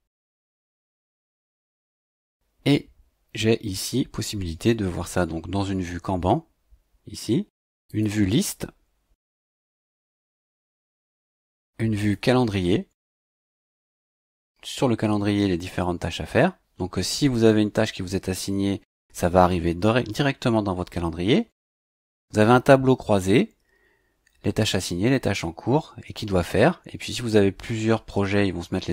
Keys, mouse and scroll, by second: 7.8 click, 11.9 click, 21.5 click.